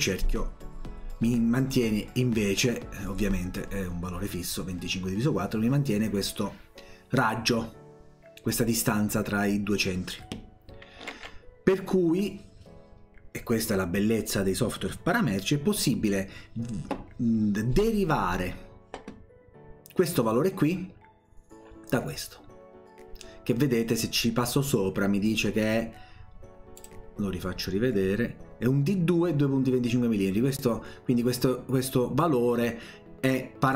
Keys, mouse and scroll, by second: 11.1 ctrl+z, 26.8 click.